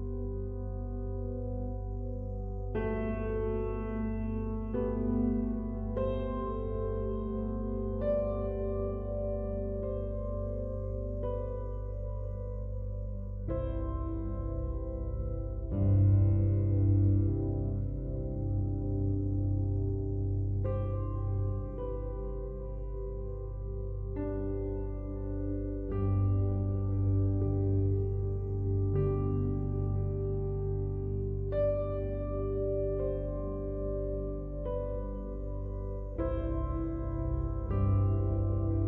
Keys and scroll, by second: 3.9 ctrl+t, 11.9 ctrl+t.